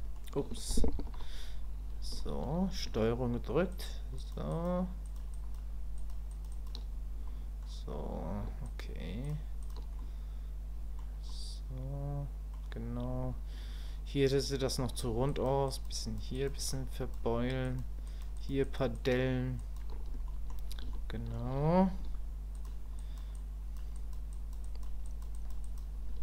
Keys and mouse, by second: 2.2 shift+click, 3.7 ctrl+click, 4.2 ctrl+click, 4.5 ctrl+click, 5.0 ctrl+click, 5.3 ctrl+click, 6.0 ctrl+click, 6.3 ctrl+click, 6.5 ctrl+click, 7.3 middle click, 8.6 ctrl+click, 9.2 ctrl+click, 10.0-11.0 middle drag, 11.3-12.5 middle drag, 15.3 ctrl+click, 15.7 ctrl+click, 16.0 ctrl+click, 16.3 ctrl+click, 16.6 ctrl+click, 16.9 ctrl+click, 17.6 ctrl+click, 18.1 ctrl+click, 18.4 ctrl+click, 18.6 ctrl+click, 18.9 ctrl+click, 19.6 ctrl+click, 20.3 middle click, 20.9 shift+click, 23.0 click, 23.4 click, 23.9 click, 24.3 click, 24.6 click, 25.0 click, 25.3 click, 25.6 click.